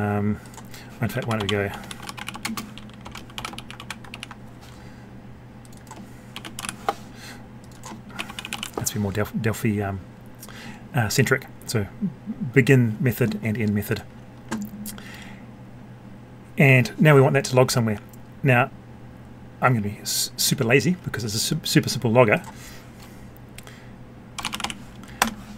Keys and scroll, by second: 3.5 ctrl+c, 4.1 ctrl+v.